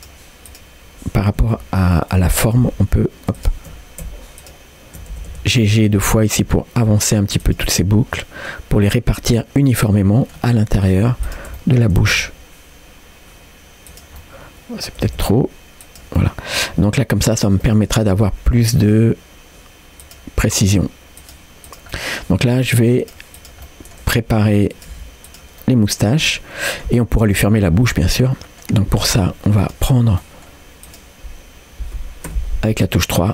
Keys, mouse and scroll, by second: 0.0 click, 0.5 click, 1.3 g, 2.5-3.5 shift+drag, 4.4 shift+click, 5.1 g, 7.8 middle click, 9.3-10.4 middle drag, 10.8 click, 11.3 shift+click, 11.6 middle click, 12.0 g, 14.2 middle click, 15.0 g, 16.2 middle click, 17.4 click, 17.7 middle click, 18.4 r, 20.5 g, 21.7 click, 21.9 middle click, 22.5 g, 23.4 click, 23.7 middle click, 24.2 r, 24.9 g, 25.6-26.9 middle drag, 27.9 middle click, 29.6 click, 30.2 middle click, 30.9 click, 32.3 3.